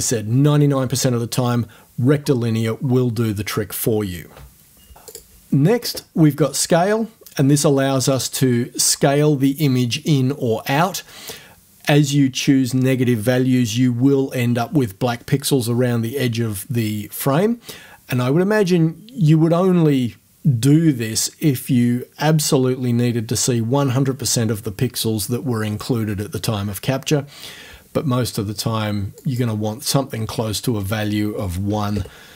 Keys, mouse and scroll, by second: 5.1 click, 8.1 click, 29.2 click, 30.8 right click, 31.7 1, 31.9 Return.